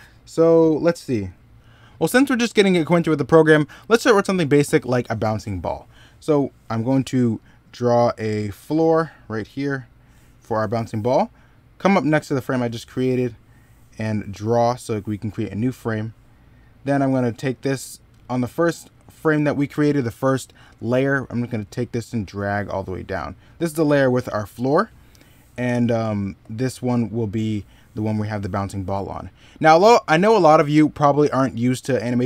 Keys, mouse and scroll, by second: 4.6 middle click, 28.9 middle click.